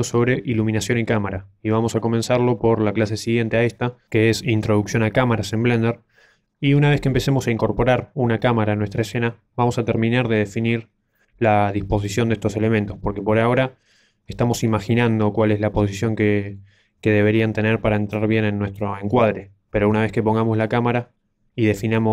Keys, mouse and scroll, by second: 0.8-1.4 scroll down 3, 1.5 shift+middle click, 2.0 middle click, 19.2 middle click.